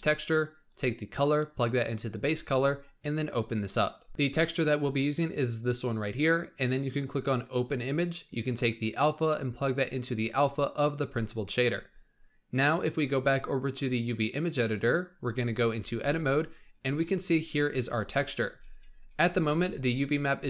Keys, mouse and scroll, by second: 0.6-4.1 drag, 8.5-15.1 drag, 15.1-16.0 scroll up 2, 16.0 Tab, 16.9-17.8 scroll down 8, 17.8 scroll down 2, 18.9-19.4 scroll up 1, 19.4 alt+a.